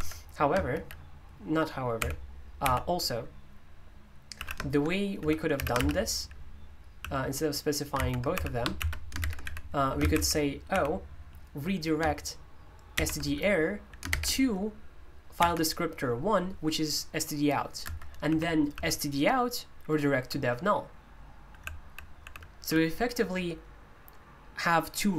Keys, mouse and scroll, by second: 0.0 Escape, 0.7 typing, 2.0-2.6 typing, 4.3-11.2 typing, 13.0-15.4 typing, 17.8-18.7 typing, 20.2-22.6 typing.